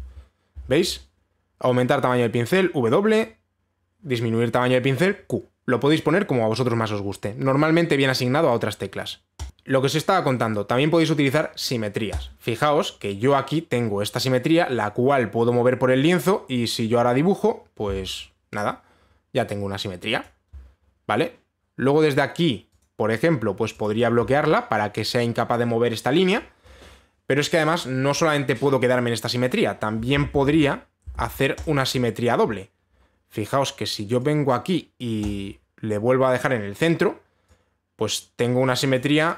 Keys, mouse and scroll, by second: 9.5 Delete, 12.8-15.9 drag, 16.5 click, 20.8 click, 21.6 right click, 21.9 click, 23.4 click, 24.4 click, 26.9 click, 30.6 click, 30.7 ctrl+z, 30.9 ctrl+z, 31.1 ctrl+z, 31.8 ctrl+shift+z, 32.2 click, 35.0 click, 35.9 click.